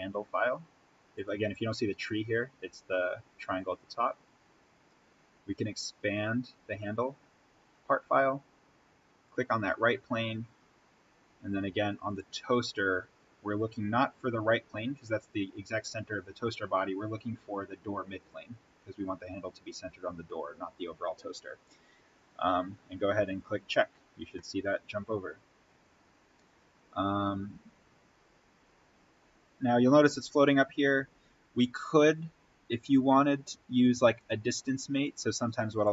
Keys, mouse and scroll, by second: 1.1 click, 5.6 click, 9.2 click, 12.0 click, 18.2 click, 23.2 click, 26.3-26.9 scroll down 1, 32.4-34.3 scroll up 1, 35.7 click.